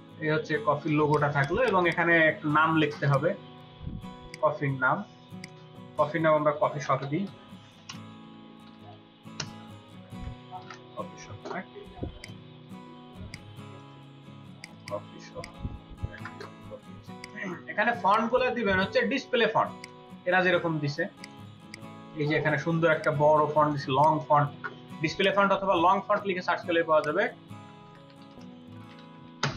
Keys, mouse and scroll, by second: 1.2 ctrl+space, 1.5 ctrl+alt+double click, 2.0 space, 6.8-7.6 typing, 14.7 double click, 16.1 BackSpace, 17.9 space, 21.5 space, 21.6 double click, 22.0-24.0 space, 27.8-28.6 typing, 29.3 Return.